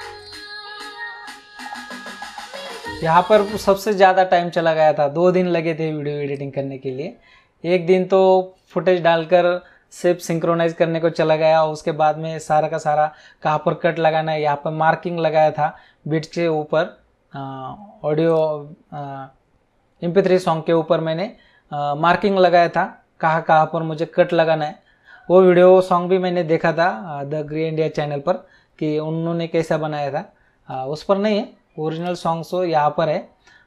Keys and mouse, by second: 0.2 click, 3.5 space, 6.3 click, 18.3 click, 32.0 click.